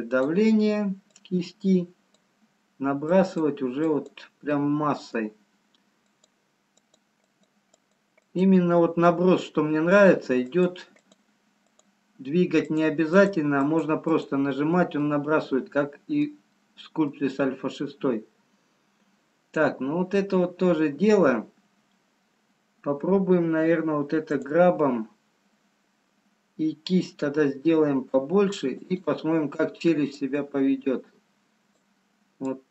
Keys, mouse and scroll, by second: 1.6 click, 4.5 click, 4.5 middle click, 7.6 click, 8.9 click, 8.9 middle click, 10.7 click, 11.5 click, 13.2 click, 13.8 click, 14.2 click, 14.7-15.1 scroll down 3, 15.8 middle click, 17.2 middle click, 18.8-20.3 scroll up 1, 24.2 click, 27.6 f, 29.6-30.7 scroll up 1, 30.7 click, 32.5 click.